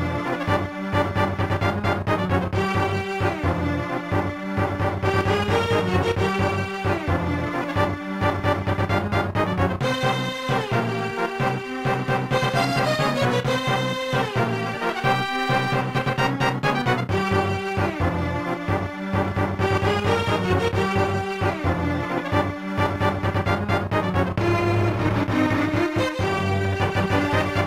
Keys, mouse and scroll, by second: 11.2 right click, 13.6 click, 15.6-17.0 typing, 16.2 Tab, 17.5 Return, 24.8 ctrl+s, 25.1 click.